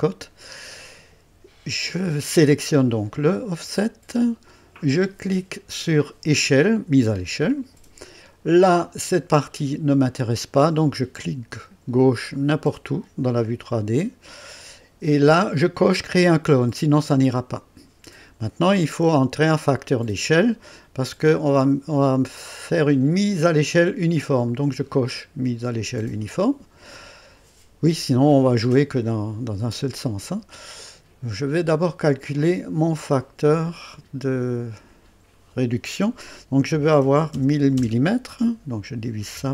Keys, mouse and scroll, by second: 6.3 click, 12.3 click, 24.4 click, 32.4 click, 33.9 click, 36.7 KP_1, 37.0 KP_0, 37.7 KP_0, 39.3 KP_Divide.